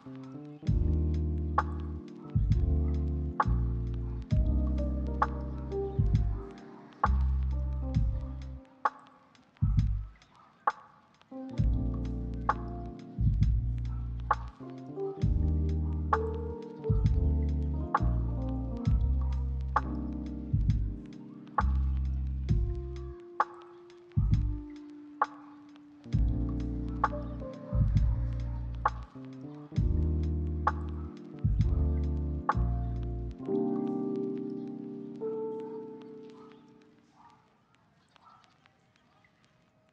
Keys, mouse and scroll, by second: 0.2-0.6 scroll down 2, 0.4 middle click, 0.6 middle click, 0.9 shift+middle click, 1.0 shift+scroll up 2, 1.2 middle click, 2.6 scroll up 1, 2.9 shift+middle click, 3.1 shift+middle click, 3.6 scroll up 1, 3.8 scroll down 1, 4.0 middle click, 4.4 shift+click, 5.9 shift+click, 6.6 shift+middle click, 6.9 shift+click, 7.0 shift+double click, 7.2 shift+click, 7.3 shift+middle click, 7.7 shift+middle click, 8.8 ctrl+click, 8.9 ctrl+middle click, 9.4 ctrl+click, 9.5 middle click, 9.9 ctrl+click, 10.4 ctrl+click, 10.8 ctrl+click, 11.3 ctrl+click, 11.7 ctrl+click, 12.0 ctrl+click, 12.2 middle click, 12.5 scroll down 1, 12.6 scroll up 1, 12.9 shift+click, 13.8 middle click, 13.8 scroll down 1, 13.9 scroll up 1, 14.0 shift+click, 14.6 g, 16.3 middle click, 17.5 shift+click, 18.6 shift+middle click, 19.3 middle click, 19.7 shift+click, 19.9 shift+middle click, 20.2 middle click, 20.4 shift+click, 21.2 g, 21.8 middle click, 22.4 scroll down 1, 22.6 middle click, 22.9 scroll up 1, 23.3 ctrl+click, 23.8 ctrl+click, 24.3 middle click, 24.4-24.7 scroll down 1, 24.9 ctrl+click, 25.5 middle click, 25.9 g, 26.6 scroll down 1, 26.8 middle click, 27.5 scroll up 1, 27.7 scroll down 1, 27.9 middle click.